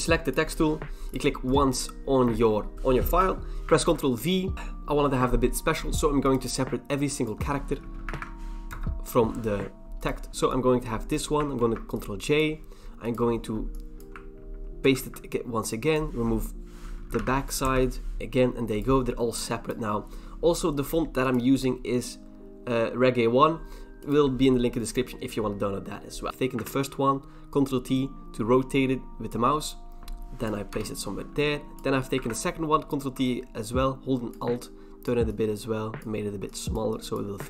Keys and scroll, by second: 3.8 ctrl+b, 3.8 ctrl+v, 8.1 ctrl+c, 8.7 BackSpace, 11.6 ctrl+j, 14.8 ctrl+v, 17.2 ctrl+c, 17.6 BackSpace, 18.2 ctrl+j, 18.2 ctrl+v, 26.6 ctrl+t, 30.7 Return, 32.2 ctrl+t.